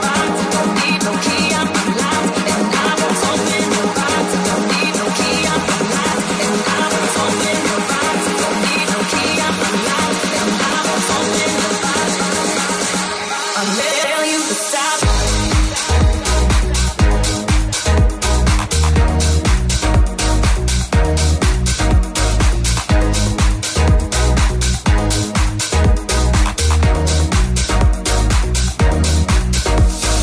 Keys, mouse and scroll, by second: 0.0 middle click, 5.9 click, 7.5-11.0 drag, 7.5-11.0 middle drag, 14.9 ctrl+r, 20.8 alt+middle click, 20.9 alt+z, 22.3 alt+z, 23.4 alt+z, 23.8 alt+z, 24.3 g, 26.2-30.2 alt+middle drag, 26.5 alt+z, 27.0-28.6 alt+drag, 27.0-28.6 alt+right drag, 27.1 alt+z, 27.6 g.